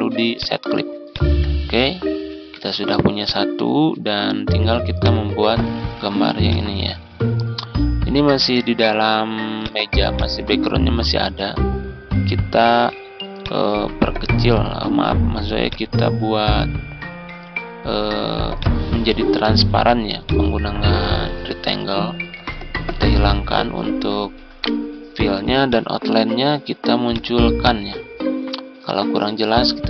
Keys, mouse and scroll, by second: 0.3 click, 1.6 ctrl+scroll down 1, 3.1 click, 4.3 z, 4.8-5.9 drag, 7.8 ctrl+scroll down 1, 9.5 click, 11.4 ctrl+scroll up 1, 13.3 click, 15.6-17.3 ctrl+drag, 18.5 click, 21.7-23.0 drag, 24.5 right click, 25.6 click.